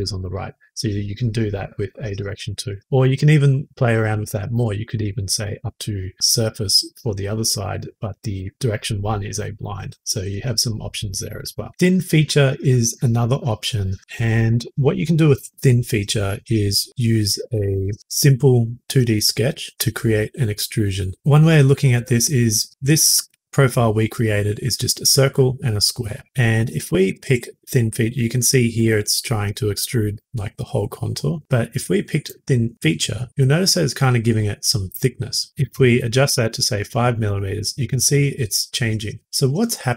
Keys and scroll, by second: 35.5-36.2 typing.